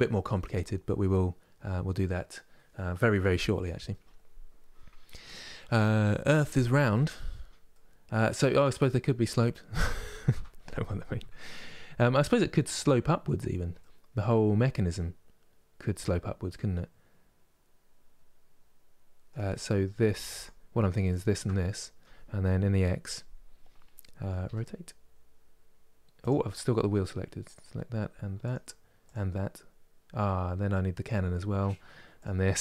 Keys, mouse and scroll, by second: 7.4-10.4 middle drag, 11.8-20.0 middle drag, 20.0-21.3 shift+drag, 21.3 middle click, 22.3 KP_3, 24.1 r, 27.1-32.6 drag.